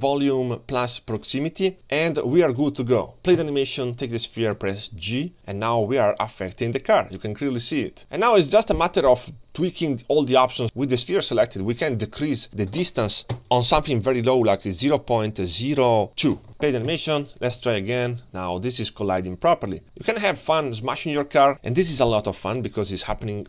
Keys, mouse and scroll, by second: 3.8 click, 3.8 space, 4.1 g, 10.6 click, 10.6 space, 12.5-16.5 drag, 16.9 space, 17.4 click, 17.6 g.